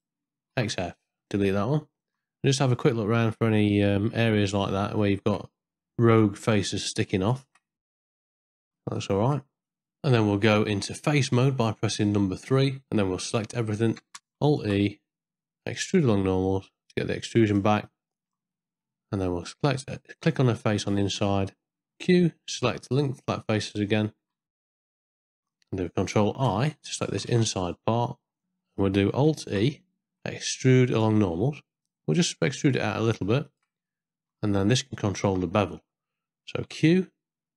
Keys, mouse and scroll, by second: 0.5 x, 1.2 middle click, 1.7 ctrl+middle click, 3.0 middle click, 5.0 shift+middle click, 6.8 ctrl+middle click, 7.3 shift+middle click, 7.8 middle click, 8.2 shift+middle click, 8.4 middle click, 8.6 middle click, 8.8 ctrl+middle click, 9.1 shift+middle click, 9.7 middle click, 10.2 Tab, 11.6 4, 11.9 3, 12.3 a, 12.8 middle click, 14.6 alt+e, 17.9 middle click, 18.6 middle click, 20.8 shift+click, 21.8 q, 22.3 q, 25.4 middle click, 27.3 ctrl+i, 28.4 ctrl+z, 28.4 middle click, 29.4 alt+e, 34.0 middle click, 34.7 ctrl+middle click, 36.6 q.